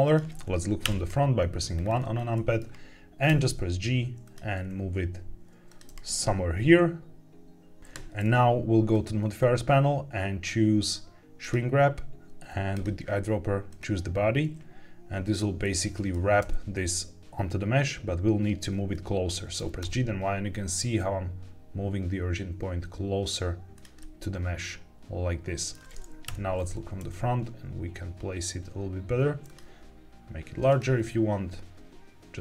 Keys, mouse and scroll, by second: 0.0 click, 0.8 KP_1, 1.7-2.1 scroll up 3, 2.3 shift+middle drag, 3.2 g, 4.2 click, 4.5 s, 5.6 click, 5.8 g, 8.8-11.4 drag, 12.6 click, 15.5-16.0 middle drag, 16.3 g, 18.7 Escape, 19.5 g, 19.7 y, 23.7 click, 23.9-25.6 middle drag, 26.2 KP_1, 26.9 g, 29.4 click, 29.6 s, 30.6 click, 30.7 g.